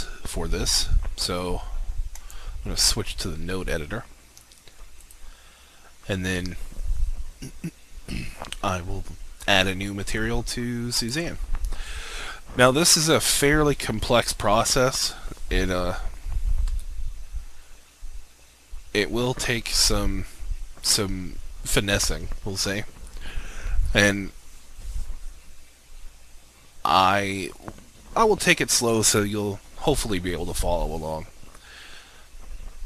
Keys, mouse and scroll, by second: 5.0 right click, 8.6 right click, 11.0 click.